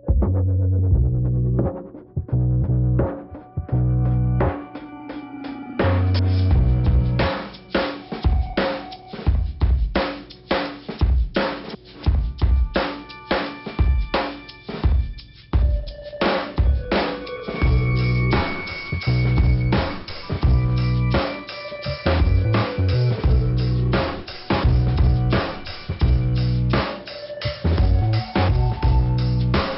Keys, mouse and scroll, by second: 0.4 right click, 1.2 click, 1.3 click, 2.5 click, 3.4 click, 3.9 click, 5.1 click, 7.8 middle click, 9.7 click, 10.4 click, 11.2 click, 12.1 click, 13.2 click, 13.9 click, 14.6 click, 15.3 ,, 16.3 scroll down 2, 17.5 click, 23.0 click, 24.4 click, 25.9 click, 27.2 scroll up 1, 27.7 click, 28.8 click, 29.6 click.